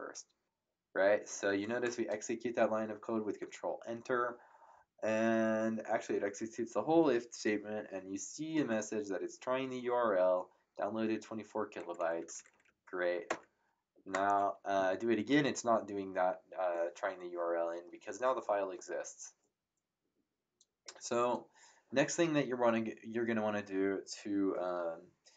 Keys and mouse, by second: 12.0 Up, 13.2 ctrl+Return.